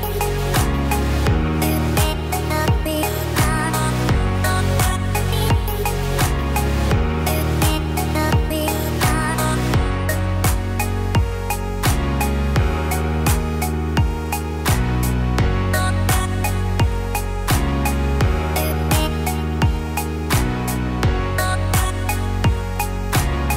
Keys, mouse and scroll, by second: 0.3 Tab, 1.7 a, 2.9 shift+d, 19.9 shift+d.